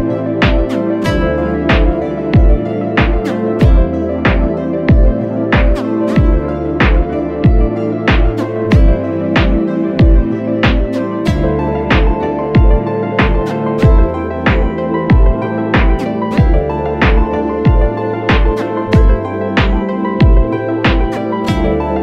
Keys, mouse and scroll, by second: 1.7 ctrl+t, 2.6 alt+shift+click, 6.8 alt+shift+click, 10.8 alt+shift+click, 14.3 Return, 16.4 ctrl+h, 17.6 double click.